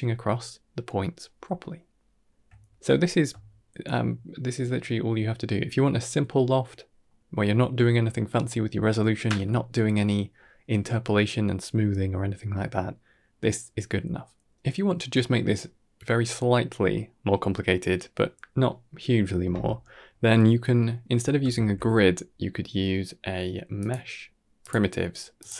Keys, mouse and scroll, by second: 0.6-1.1 middle drag, 1.8-2.1 shift+middle drag, 2.4-2.8 middle drag, 3.1 scroll down 1, 3.3-3.6 shift+middle drag, 3.9-4.5 middle drag, 6.5-6.9 middle drag, 14.4-15.1 middle drag, 17.0-17.8 middle drag, 19.7 middle click, 21.1 middle click, 21.4 shift+a.